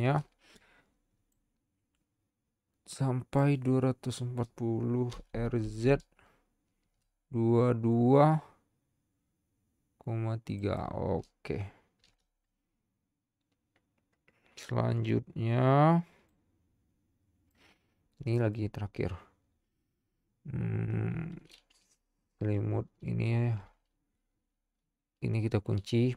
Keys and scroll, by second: 5.3 r, 5.6 z, 12.0 |.